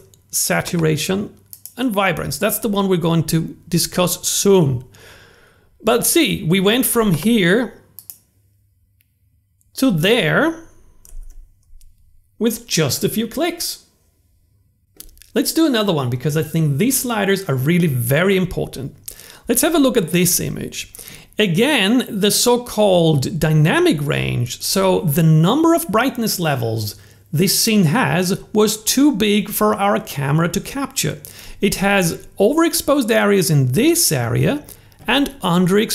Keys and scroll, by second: 9.2 super+z.